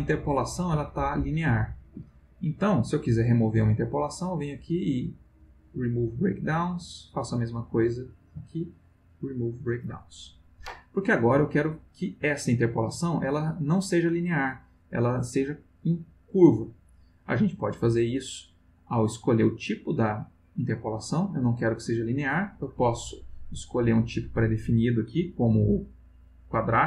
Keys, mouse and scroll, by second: 1.9 Escape, 4.3 click, 5.4 click, 6.8 click, 8.3 click, 9.0 click, 17.5 click, 21.6 click, 26.4 click.